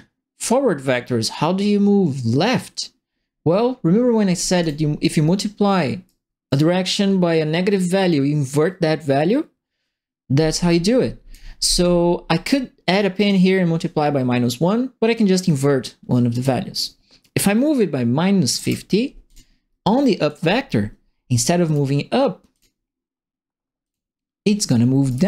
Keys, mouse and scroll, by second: 4.6 click, 6.0 right click, 10.6 click, 15.4 click, 16.3 click, 18.5 KP_Subtract, 18.6 KP_Enter, 20.2 click, 21.6 click, 22.5 click, 23.8 click, 24.8-25.2 typing, 25.0-25.2 right drag.